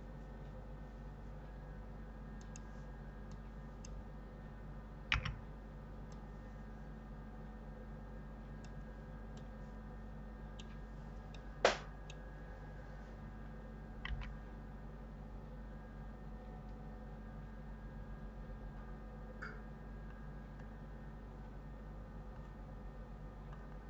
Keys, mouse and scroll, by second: 3.1 click, 5.0 b, 9.2-13.9 middle drag, 13.9 g.